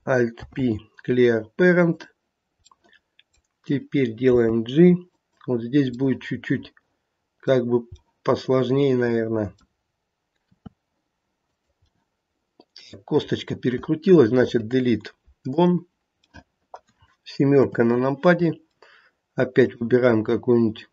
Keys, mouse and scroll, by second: 0.3 alt+p, 2.7 middle click, 4.3 g, 6.0 middle click, 6.9 middle click, 7.9 scroll up 1, 8.0 middle click, 8.5 middle click, 8.9 middle click, 9.0 middle click, 10.4 r, 11.9 middle click, 12.2 middle click, 14.3 Delete, 16.3 middle click, 16.6 middle click, 17.6 KP_7, 18.4 scroll down 1, 19.5 click.